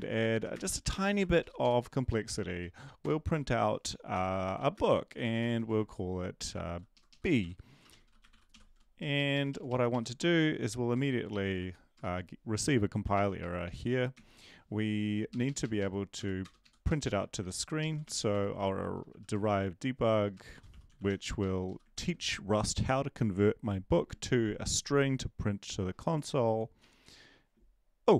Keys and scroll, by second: 0.0-2.1 typing, 2.3 Down, 3.0 Return, 3.9-5.6 typing, 6.5 Left, 7.4 End, 7.6-11.5 typing, 9.1 Right, 9.3 Right, 9.5 Right, 9.9 Right, 13.0 b, 13.6 Right, 14.1 ctrl+s, 15.3 Up, 16.1 Home, 16.4 Return, 16.6 Up, 16.9-21.5 typing, 21.6 Down, 21.9 ctrl+s, 26.8 Up.